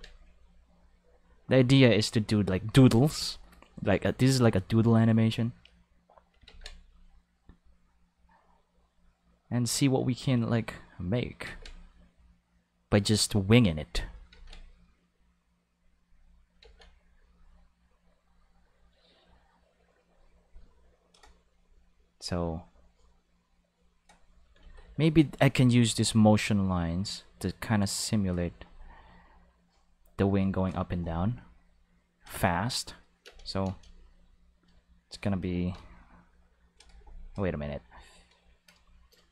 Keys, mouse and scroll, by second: 0.3 click, 1.4 click, 2.4 click, 5.6 click, 6.5 ctrl+z, 6.9 click, 10.5 click, 11.5 ctrl+z, 11.9 click, 13.3 click, 14.3 ctrl+z, 15.8 click, 16.6 ctrl+z, 17.0 click, 18.2 click, 20.1 click, 20.9 click, 22.5 click, 22.8-24.2 drag, 24.6 ctrl+z, 24.8 ctrl+z, 25.2 ctrl+z, 25.6 ctrl+z, 26.0 ctrl+z, 26.9 click, 27.8 click, 29.6 click, 30.3 click, 31.6 click, 33.3 space, 33.7 space, 34.0-34.4 drag, 34.9 shift+right click, 35.6 shift+d, 36.6 right click, 39.1 shift+right click.